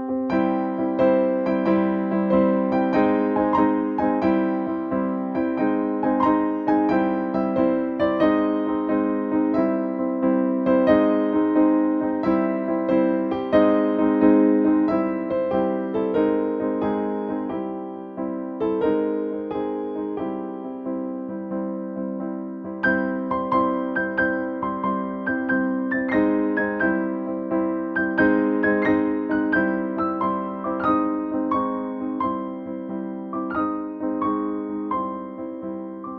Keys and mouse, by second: 6.6 typing, 7.2-15.2 drag, 18.3 shift+Right, 20.5 shift+Down, 24.1 Right, 25.3 click, 27.4 ctrl+j, 28.0 click, 29.3 right click, 30.8 click, 34.3 click.